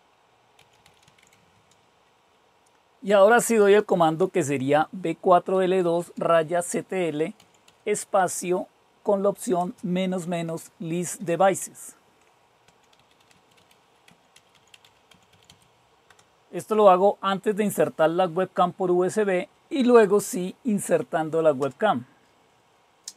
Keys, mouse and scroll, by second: 0.0-1.4 typing, 2.8-5.7 typing, 7.3-16.1 typing, 19.2 Up, 21.4 Return.